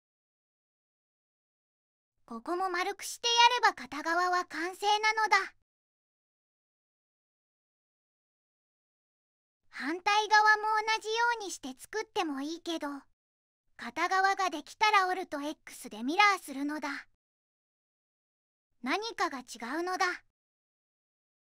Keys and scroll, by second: 0.1 2, 16.5 alt+x.